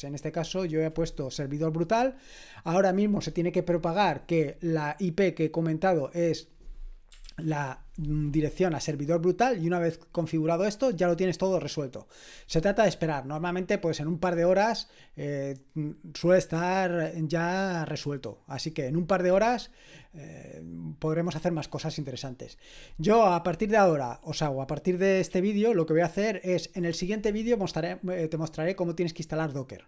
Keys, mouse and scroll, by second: 7.3 ctrl+l.